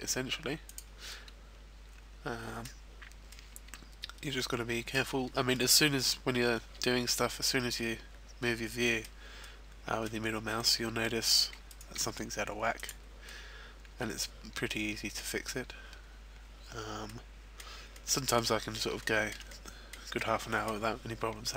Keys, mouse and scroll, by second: 0.7 click, 1.0 middle click, 3.0 scroll down 3, 4.8 middle click, 5.5 middle click, 6.2-6.6 scroll up 1, 7.3 middle click, 9.4 middle click, 10.6 middle click, 11.7 right click, 12.1 g, 13.2 click, 13.2 middle click, 15.3-16.5 scroll up 1, 16.7-17.3 scroll down 2, 17.0 middle click, 17.9 middle click, 19.0 shift+middle click, 19.5 shift+middle click.